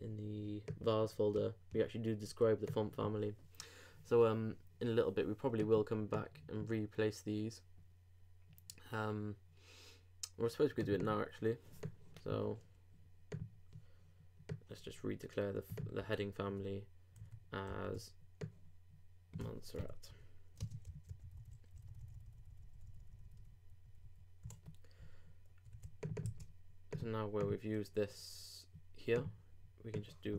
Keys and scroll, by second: 16.0 super+v, 17.2 super+z, 17.7 super+v, 20.8 super+space, 20.9 super+Right, 21.2 super+Delete, 25.7 super+s, 26.2 super+c.